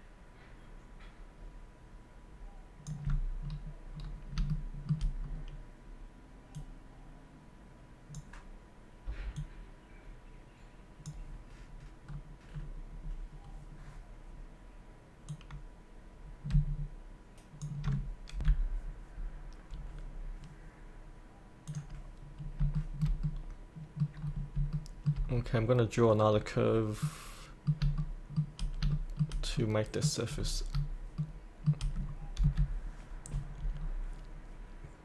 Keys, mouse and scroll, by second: 3.4-4.3 scroll down 1, 4.5 shift+middle click, 5.2-6.5 scroll down 1, 6.6-11.9 drag, 12.1 scroll down 1, 15.3-18.0 drag, 18.4 F8, 19.7 scroll up 1, 21.6 click, 22.4 scroll up 1, 22.7 shift+middle click, 24.2 scroll down 1, 24.7 shift+middle click, 25.2-27.1 scroll down 1, 27.1-28.4 middle drag, 28.9 shift+middle click, 30.4-30.7 scroll up 1, 31.1 shift+middle click, 31.4 shift+middle click, 32.4 F8, 33.3 scroll down 1, 33.8 scroll up 1.